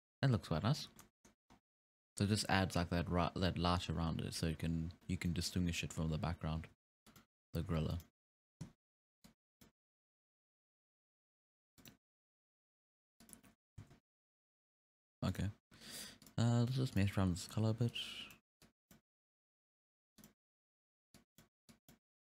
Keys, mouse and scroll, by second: 0.7-1.0 scroll down 1, 1.0-1.5 middle drag, 1.5-1.8 scroll down 3, 1.8-2.5 scroll up 1, 2.5-3.1 scroll up 2, 4.0-4.6 scroll down 3, 4.6-5.3 scroll up 5, 5.3-6.6 middle drag, 6.6 g, 7.6 g, 9.2 click, 10.2 s, 12.2 s, 13.8 alt+a, 15.3 right click, 16.2 click, 16.9 click, 17.9 click.